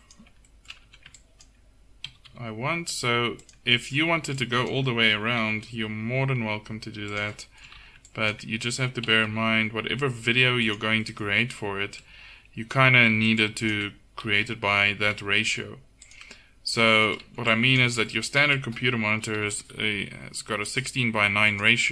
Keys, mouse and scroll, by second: 0.9 a, 2.1 g, 4.1 a, 5.3 click, 5.4 g, 6.1 click, 7.8 a, 9.8 g, 13.1 a, 14.3 g, 17.3 a, 17.6-20.5 drag, 19.2 g.